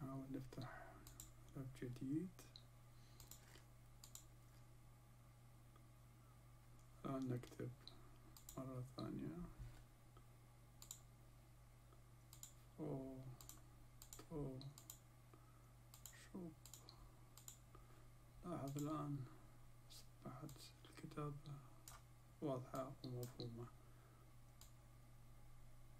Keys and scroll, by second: 12.3 f, 13.4 و, 14.0 ت, 14.7 و, 15.9 ش, 16.6 و, 17.3 ب.